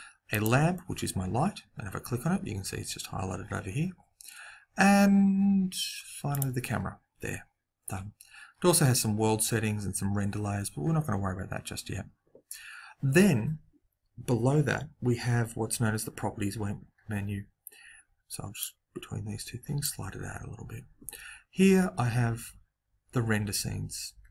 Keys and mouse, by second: 0.2 click, 3.8-6.2 middle drag, 6.2 click, 8.4-18.6 middle drag, 18.6 click.